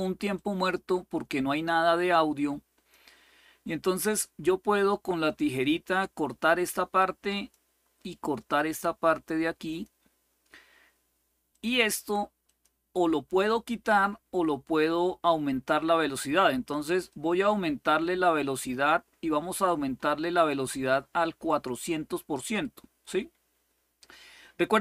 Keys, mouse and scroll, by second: 0.1-2.8 drag, 4.5 click, 7.1 click, 9.4 click, 10.2 click, 11.3 click, 12.2 click, 17.0 right click, 18.0-22.8 right drag.